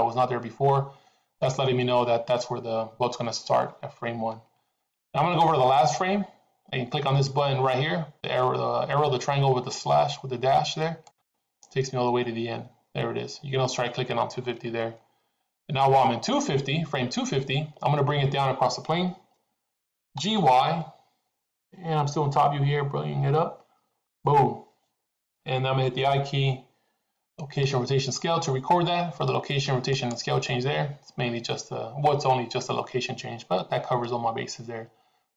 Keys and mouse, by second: 10.9-12.1 drag, 20.1 g.